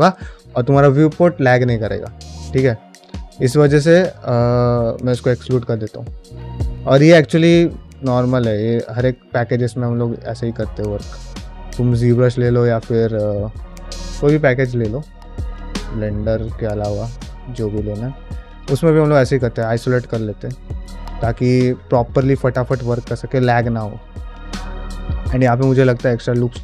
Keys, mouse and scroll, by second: 2.4 middle drag, 2.9 drag, 3.3-3.8 middle drag, 4.0 shift+middle click, 5.4 shift+middle click, 5.8 ctrl+Tab, 6.2 middle click, 6.4 f, 6.9 shift+click, 7.9 alt+q, 8.5 shift+click, 9.4 ctrl+z, 9.8-11.9 shift+drag, 12.1 middle click, 12.7 ctrl+z, 13.2 middle click, 13.5 shift+middle click, 15.1 click, 15.7 middle click, 16.1-18.2 shift+drag, 18.4 middle click, 18.6 shift+click, 19.1 middle click, 19.4 shift+click, 19.7 shift+middle click, 20.0 middle click, 20.7 shift+click, 21.5 shift+middle click, 21.8 middle click, 22.0 shift+click, 22.5 shift+middle click, 22.9 shift+middle click, 23.3 middle click, 23.7 shift+click, 24.2 shift+middle click, 24.4 middle click, 25.8 ctrl+middle click, 26.1-26.6 middle drag.